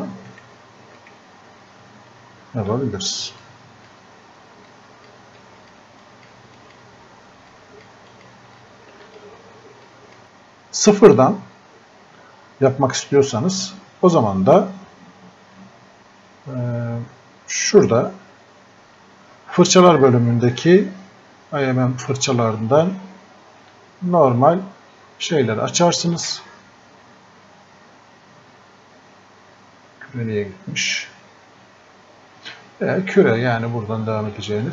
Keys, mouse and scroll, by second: 0.3 right click, 2.7 s, 3.4-10.2 drag, 17.6 click, 34.6-34.7 alt+drag.